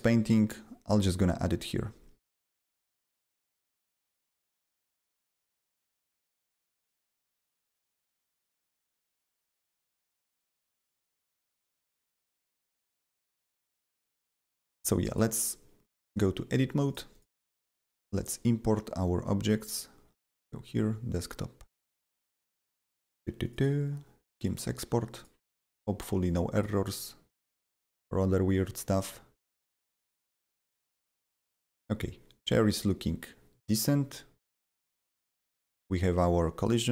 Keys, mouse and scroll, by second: 1.1 click, 7.0 click, 8.7 click, 10.5 click, 10.9 click, 13.3 click, 13.9 right click, 15.1 click, 16.0 click, 16.8 click, 17.1 double click, 17.5 right click, 18.1 click, 20.3 click, 20.3 click, 21.1 click, 23.4 click, 23.5 double click, 24.2 click, 24.4 double click, 25.1 click, 26.2 shift+click, 26.5 shift+click, 27.2 shift+click, 28.9 shift+click, 30.4 double click, 32.3 click, 32.5 s, 33.8 click, 36.6 click.